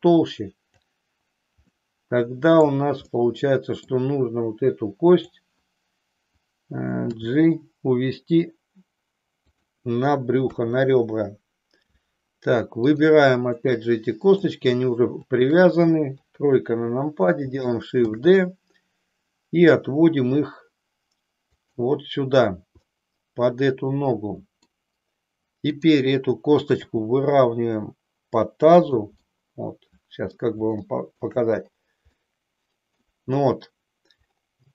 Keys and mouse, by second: 1.7-2.9 middle drag, 3.2 middle click, 5.1 click, 7.2 g, 9.6 click, 10.3 KP_3, 12.7 click, 13.6 middle click, 16.3 KP_3, 17.9 shift+d, 22.8-24.7 middle drag, 26.8 g, 29.4-30.4 middle drag, 30.8 shift+middle click, 32.2 middle click.